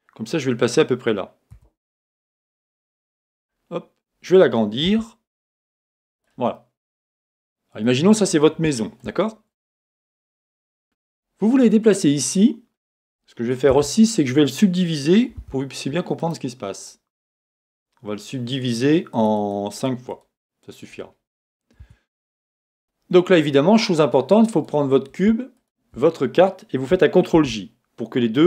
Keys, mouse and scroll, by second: 1.5-3.4 middle drag, 1.5 g, 3.4 click, 3.7-4.9 scroll down 1, 4.9 s, 6.2 click, 6.5-16.2 middle drag, 9.2-9.7 scroll up 2, 15.5 w, 16.2-19.1 right drag, 19.1-20.9 drag, 21.8 Tab, 22.5-24.5 middle drag, 24.5 click, 25.5 shift+click, 27.7 ctrl+j.